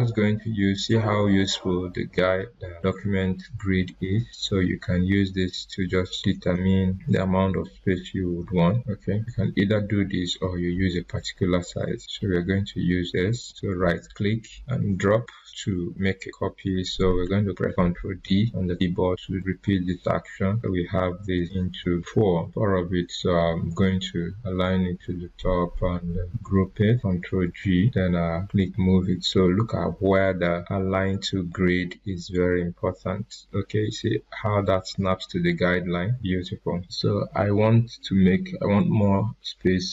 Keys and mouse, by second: 3.8-10.3 drag, 13.4 right click, 17.2 ctrl+Num_Lock, 17.2 right click, 18.2 ctrl+d, 20.5 ctrl+d, 21.3 click, 21.4-22.9 drag, 24.3 t, 26.2 ctrl+g, 28.4-35.1 drag.